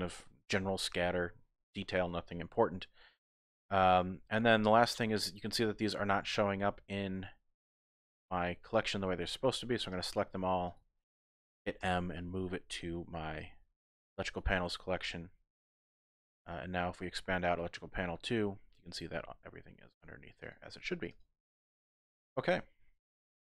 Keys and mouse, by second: 9.9 click, 10.7 shift+click, 11.8 m, 17.5 click, 20.4 click, 21.1 click, 21.3 typing, 21.9 click.